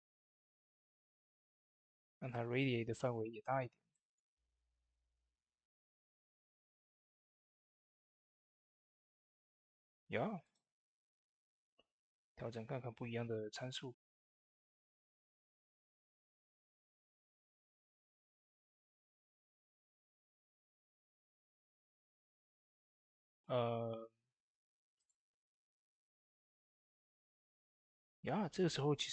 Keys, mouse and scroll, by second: 0.1 click, 0.2 click, 6.5 click, 10.3 click, 10.3-21.1 drag, 22.0 click, 24.8 click, 27.6 click.